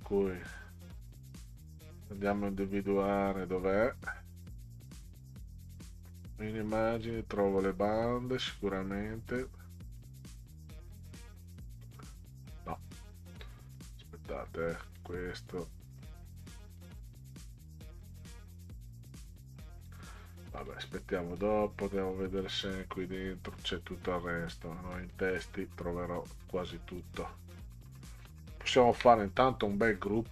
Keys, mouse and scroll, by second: 2.2 click, 3.3 click, 5.7 click, 6.8 click, 9.3-10.0 drag, 10.7 click, 11.9 click, 13.9 click, 15.0 click, 16.8 click, 18.2 click, 20.6 click, 22.4 click, 23.5 click, 25.1 click, 26.2 click, 28.9 ctrl+g.